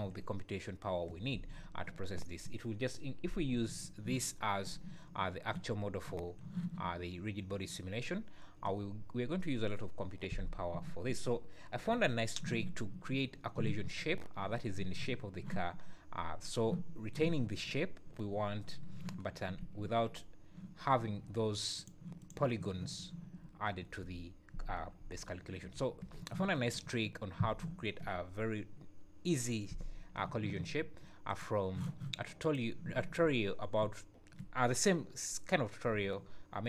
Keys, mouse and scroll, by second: 3.8 `, 4.4 scroll down 1, 4.6 `, 5.3 `, 5.6 scroll down 2, 10.8 `, 11.9 KP_1, 16.4-18.2 scroll up 1, 19.8 `, 20.2-20.6 scroll up 2, 21.8 click, 22.2 click, 23.7 scroll down 2.